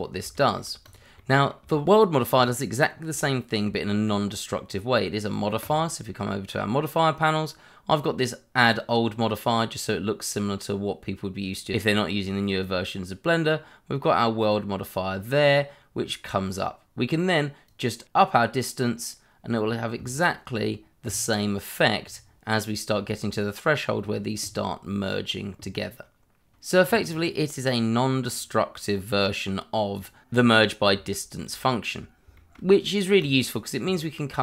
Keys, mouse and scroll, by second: 0.0 scroll down 1, 0.3 shift+middle click, 0.8 click, 1.1 middle click, 1.6 shift+scroll down 1, 2.6 scroll up 1, 3.2 shift+middle click, 5.6 click, 8.6 click, 11.7 scroll down 1, 14.4 click, 16.5 scroll up 1, 17.6 click, 27.1 scroll down 1, 28.0 middle click, 29.9 click, 31.1 shift+middle click, 32.4 middle click, 32.5 shift+middle click, 33.2 click.